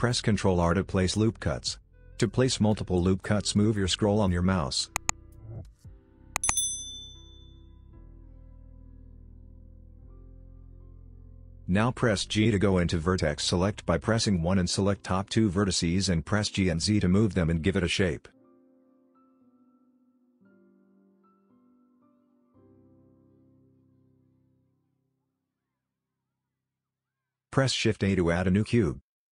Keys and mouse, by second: 7.0 middle click, 7.8 middle click, 9.9 click, 14.6 click, 16.1 g, 19.2 click, 19.9 click, 21.4 shift+click, 23.0 g, 25.5 middle click, 26.0 click, 26.3 Tab, 26.6 middle click, 26.7 KP_3, 27.0 shift+a.